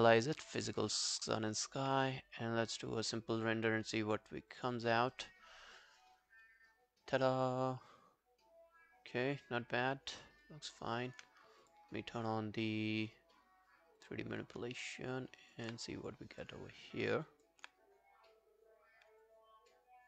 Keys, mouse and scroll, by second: 7.3-7.8 scroll up 1, 10.3 alt+click, 14.8 alt+click, 16.7 alt+click, 19.3 alt+click.